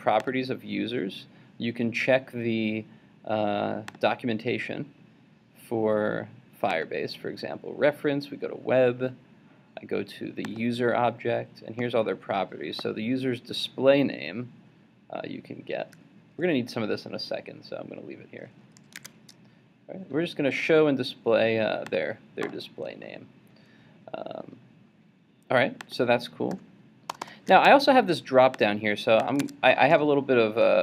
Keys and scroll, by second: 19.0 super+Tab, 29.4 super+Tab.